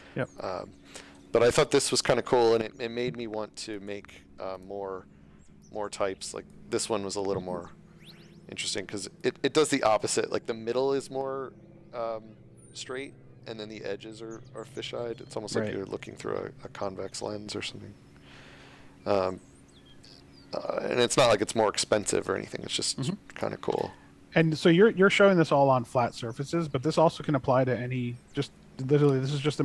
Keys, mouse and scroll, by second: 0.3 click, 2.8 space, 3.6 click, 4.5 click, 9.1 click, 9.9-10.3 scroll down 1, 10.5 scroll down 1, 11.5 scroll down 1, 12.1 scroll, 12.7 scroll, 17.3-17.7 scroll up 1, 18.0 scroll up 1.